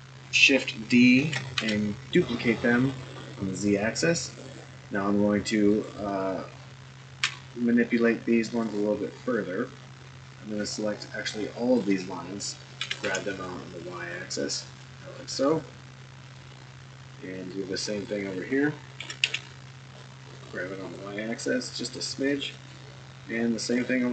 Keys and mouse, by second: 1.1 shift+d, 7.2 2, 8.5 click, 10.7-11.8 drag, 12.8 g, 16.4 click, 17.6 click, 19.0 g, 22.8 click.